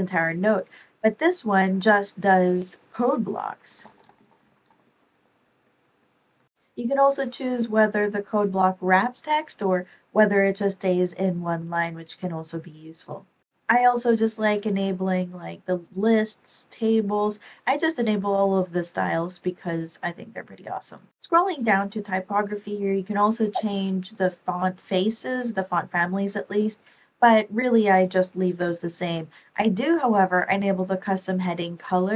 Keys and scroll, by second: 3.5-5.3 typing, 5.4 super+Right, 5.8 super+Up, 6.3 Down.